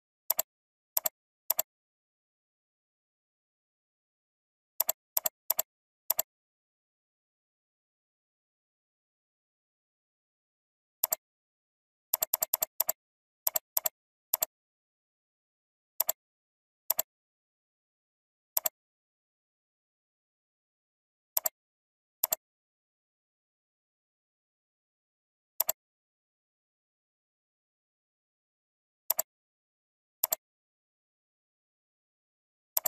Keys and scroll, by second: 16.0 ctrl+t.